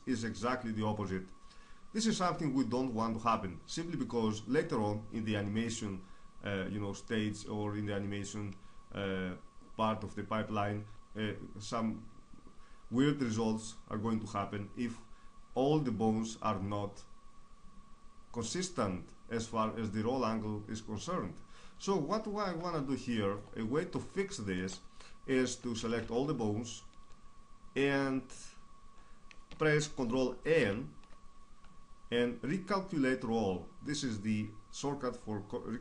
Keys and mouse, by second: 1.6-6.4 middle drag, 22.4-25.4 middle drag, 25.4 a, 25.6 a, 30.2 ctrl+n.